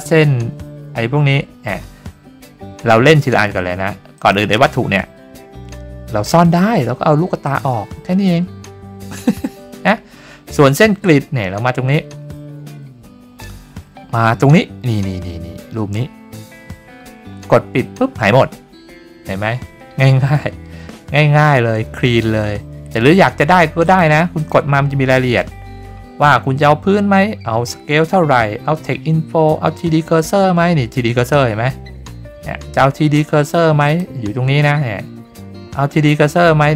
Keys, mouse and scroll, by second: 4.1 click, 7.4 click, 17.7 click, 23.8 click, 24.3 click, 33.8 click.